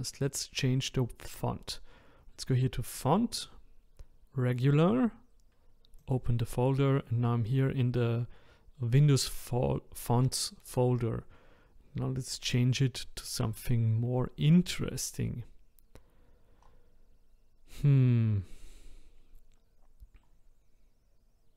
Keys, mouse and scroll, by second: 2.9-18.9 drag.